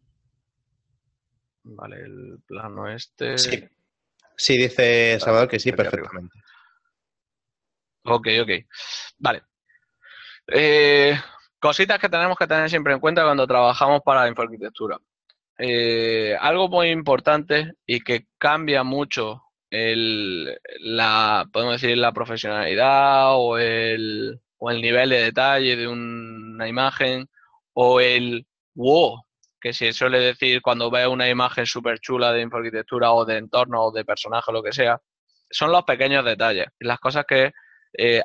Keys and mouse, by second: 2.9 right click, 3.1 click, 5.3 right click, 6.6 g, 7.9 ctrl+click.